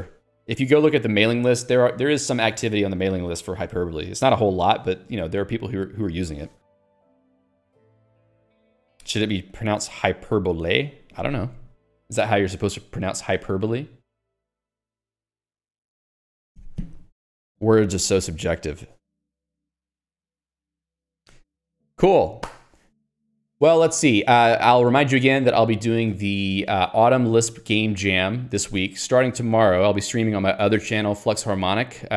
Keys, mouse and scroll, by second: 19.9 click, 20.5 Escape, 21.6 Escape.